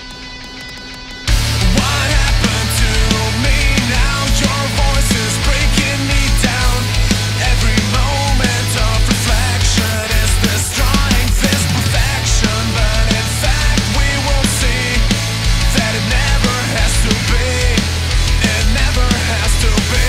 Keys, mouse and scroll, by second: 0.7 click, 8.4 F3, 9.7-10.4 ctrl+scroll down 1, 10.4-11.2 ctrl+scroll up 1, 11.2-11.8 ctrl+scroll down 1, 11.8-12.8 scroll down 1.